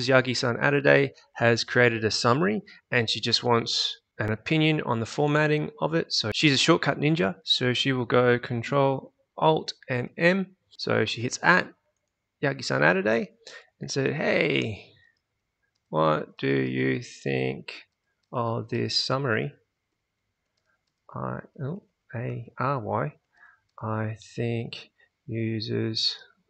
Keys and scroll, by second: 10.7 @, 13.4-26.4 typing.